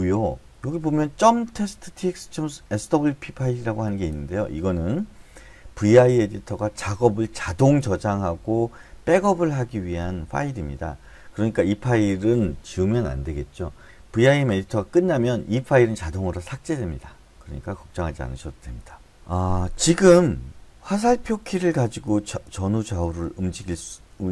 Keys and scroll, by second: 21.0 Left, 21.4 Left, 21.7 Left, 22.0 Left, 22.4-23.2 Left, 23.9 Up.